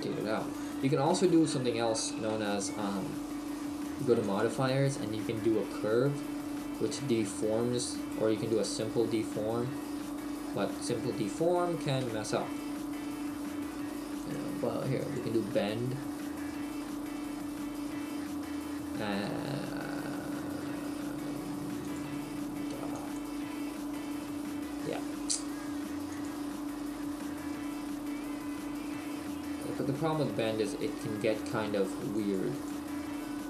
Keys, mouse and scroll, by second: 4.3 click, 10.1 middle click, 14.2 click, 16.8 middle click, 17.9-18.3 scroll down 1, 18.9-19.8 scroll down 1, 21.9 click, 24.0 middle click, 26.1 click, 27.2 middle click, 28.3-28.9 scroll down 4, 28.9 middle click, 32.2 click.